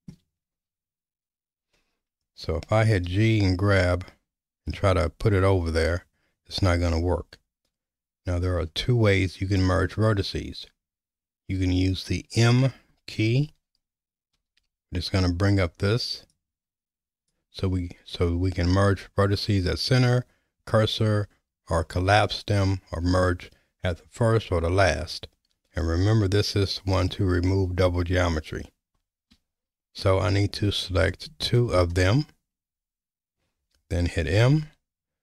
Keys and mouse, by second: 3.1 g, 14.4 m, 31.4 shift+right click, 34.2 m.